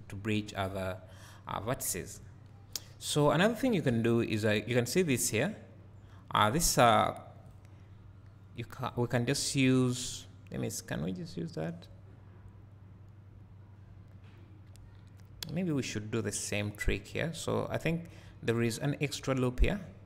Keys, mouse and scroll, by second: 0.4 2, 1.7-2.1 scroll down 1, 3.3-3.9 scroll up 1, 3.9 1, 6.5 click, 8.6-17.4 drag.